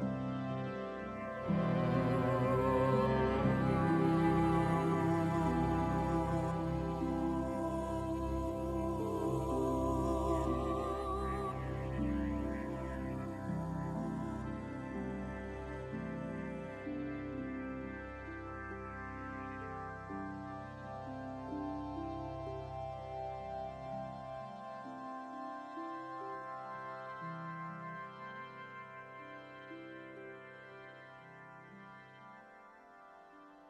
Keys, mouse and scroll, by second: 0.7 r, 2.0 space, 2.6 alt+right click, 3.3 g, 5.9 alt+right click, 6.7 g, 7.5 middle click, 8.1 alt+right click, 8.5 g, 10.0 alt+right click, 11.7 g, 13.3 alt+right click, 13.7 click, 14.3 g, 16.0 middle click, 16.3-17.0 scroll down 4, 16.5 middle click, 17.0 Tab, 17.1 middle click, 18.0 middle click, 19.2 middle click, 20.3 middle click, 20.6-21.0 scroll up 2, 21.0 click, 21.8 Tab, 22.9-24.3 typing, 26.2 g, 27.5 right click, 28.0 c, 28.5 g, 29.4 middle click, 30.6 middle click, 31.8 alt+right click, 32.3 g, 33.2 alt+right click.